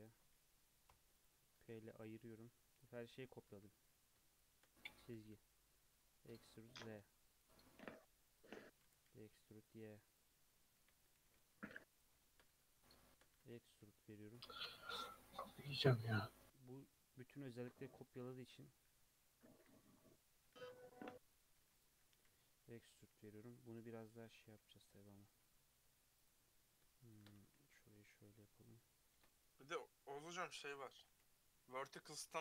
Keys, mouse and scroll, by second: 0.9 p, 1.4 Tab, 1.7 alt+z, 2.0 click, 2.7 click, 3.2 Tab, 3.5 2, 3.8 click, 4.3 shift+middle click, 5.1 e, 7.9 2, 8.3 click, 8.8 e, 10.8 1, 11.0 click, 11.2 g, 12.2 shift+middle click, 12.5 2, 12.7 click, 13.1 shift+middle click, 13.3 e, 14.8 shift+middle click, 15.2 e, 17.5-18.1 scroll down 3, 18.3-18.7 scroll up 2, 18.7 1, 19.6 click, 20.3 g, 21.6 2, 21.7 click, 22.0 e, 23.8 1, 24.1 click, 24.2 g, 26.2 click, 27.0 shift+click, 27.3 g, 29.1 ctrl+r, 30.8 g, 31.9 click, 32.2 g.